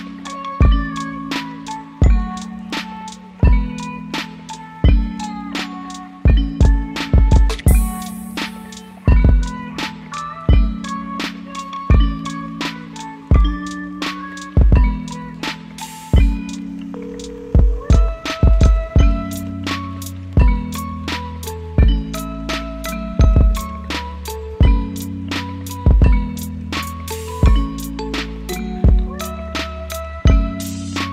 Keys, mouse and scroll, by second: 4.7 p, 5.7 u, 6.2 u, 7.5 =, 28.0 ctrl+c, 29.4 ctrl+v.